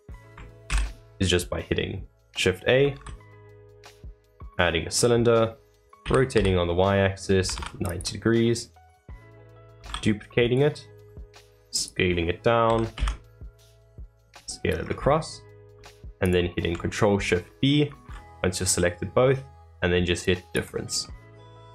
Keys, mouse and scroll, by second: 0.6 shift+a, 2.9 shift+a, 4.9-5.4 middle drag, 5.4 scroll down 3, 6.0 r, 8.4-9.7 middle drag, 9.7 shift+d, 12.1-12.6 middle drag, 12.6 s, 14.7 scroll down 2, 15.1-16.2 middle drag, 16.2 shift+click, 21.0-21.7 middle drag.